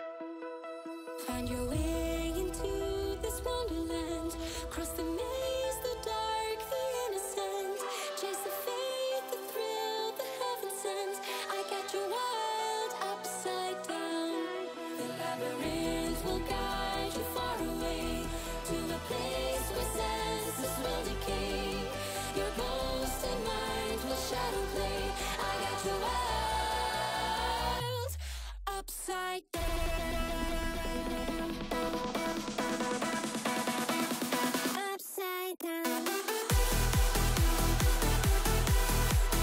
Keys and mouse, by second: 2.6 click, 4.2-5.1 drag, 13.2-13.6 right drag, 14.3-14.9 drag, 15.2-16.0 drag, 17.6 click, 19.0 n, 20.4 space, 21.0 space, 21.4 click, 21.6 space, 23.8 space, 24.1 click, 24.9-25.6 drag, 26.5 ctrl+s, 27.7 click, 28.9 click, 30.2 KP_0, 31.7 click, 32.5 shift+a, 35.2 KP_7, 36.0 g, 37.2 KP_0, 37.8 g.